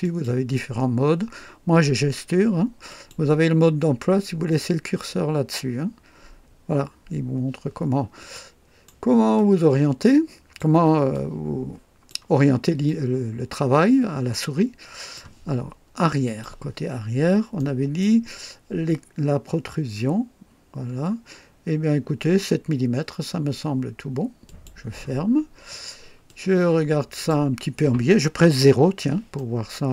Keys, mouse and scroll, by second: 0.0 click, 2.9 click, 8.3-9.0 right drag, 9.3-10.7 drag, 11.1 click, 12.8-15.3 drag, 16.2 click, 16.9 scroll up 1, 17.5-18.2 right drag, 20.2 scroll down 1, 20.7 scroll up 1, 24.4 click, 25.2-26.0 scroll down 4, 26.3-27.5 drag, 28.5 KP_0, 29.3-29.9 right drag.